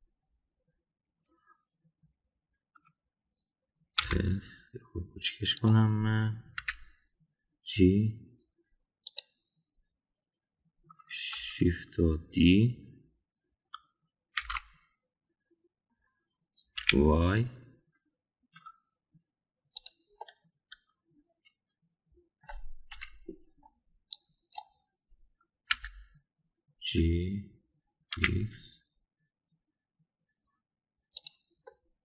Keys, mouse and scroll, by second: 4.9 s, 7.5 g, 15.4 shift+d, 21.2 scroll up 1, 21.2-23.4 middle drag, 23.4 scroll down 1, 23.9 KP_1, 25.2 click, 26.7 g.